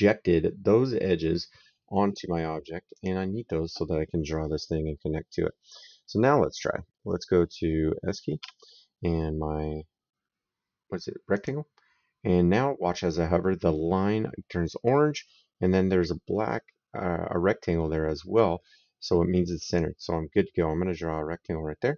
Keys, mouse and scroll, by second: 2.8 click, 8.2 s, 11.2 click, 19.5 click.